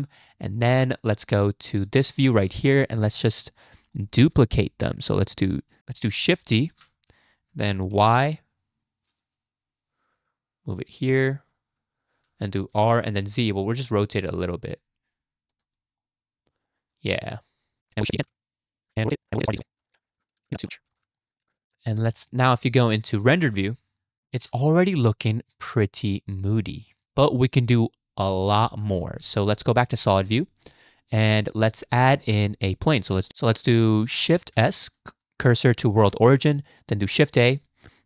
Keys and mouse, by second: 1.7 click, 3.9 shift+drag, 4.9 shift+drag, 6.7 shift+d, 12.7 r, 16.1-16.7 drag, 18.2-21.4 typing, 19.3 click, 19.7 drag, 20.7 click, 21.2 click, 21.6 click, 22.0 shift+click, 22.3 click, 22.7 shift+drag, 23.2 z, 24.9-25.7 middle drag, 26.6 click, 29.5 z, 30.4 click, 31.4 click, 31.8 shift+drag, 32.3 click, 33.3 shift+a, 33.3 x, 34.5 shift+s, 37.3 shift+a.